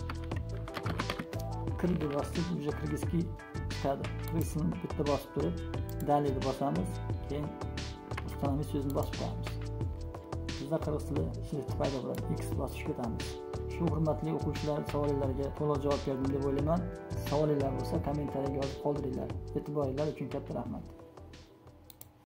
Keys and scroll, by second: 0.5-1.6 typing, 8.2 Tab.